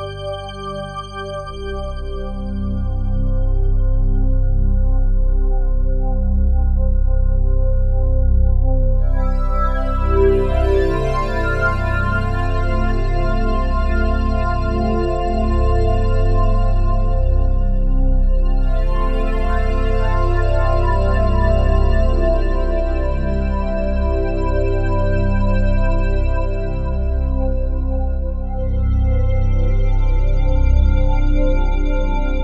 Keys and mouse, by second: 0.4 ctrl+alt+click, 0.8 alt+shift+click, 1.2 alt+click, 2.2 ctrl+s, 3.3 click, 3.6 click, 4.2 alt+click, 4.7 click, 6.1 shift+click, 7.5 /, 8.4 alt+click, 9.1 ctrl+alt+click, 9.4-10.6 alt+drag, 11.2 alt+click, 11.8 3, 12.5 click, 13.1 alt+click, 14.9 shift+click, 19.2 ctrl+a, 20.8 click, 23.5 click, 24.8 click, 25.6 alt+click, 26.2 alt+click, 27.1 shift+s, 28.0 shift+s, 28.7-31.5 drag, 30.7-31.5 typing.